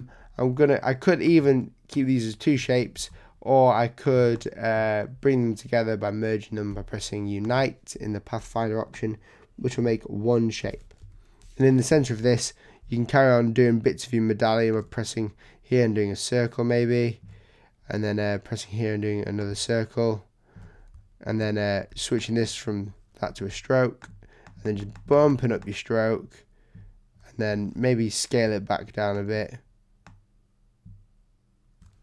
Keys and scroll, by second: 3.0 super+z, 11.0 super+0, 11.9 super+l, 27.5 v, 28.4 shift+v.